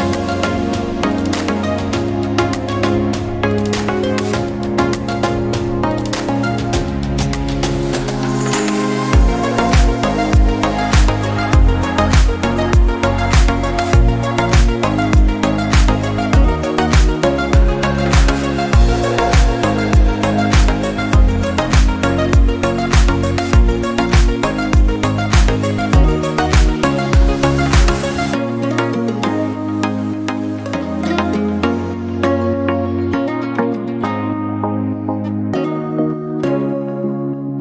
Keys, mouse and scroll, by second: 0.5 drag, 2.0 KP_1, 2.7 KP_1, 3.8 KP_3, 4.4 click, 4.7 scroll up 1, 5.1 click, 6.2 Tab, 7.0 alt+z, 7.3 click, 8.0 click, 9.4 x, 10.6 click, 11.4 click, 12.5 scroll up 3, 13.1 click, 13.9 scroll down 1, 14.2 shift+middle click, 15.0 e, 18.2-18.6 scroll down 1, 18.6 shift+middle click, 19.1 Tab, 19.5 drag, 19.9 click, 20.5 alt+z, 21.6 s, 22.5-22.9 scroll up 1, 23.1 click, 24.2-25.0 shift+middle drag, 25.0 scroll up 2, 25.5 s, 28.0 click, 30.8 click, 31.0 scroll down 3, 31.2-32.8 middle drag, 32.8 KP_1, 34.2-34.5 shift+middle drag, 34.5-35.1 scroll up 4, 35.1-35.5 shift+middle drag, 35.5 click, 36.1 Tab, 37.2 KP_3.